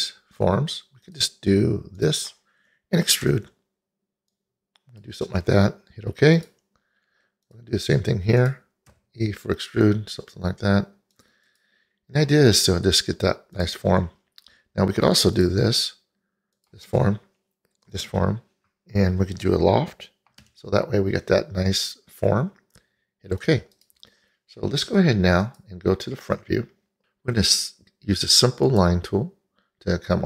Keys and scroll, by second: 3.3 f, 9.0 e, 20.5 l.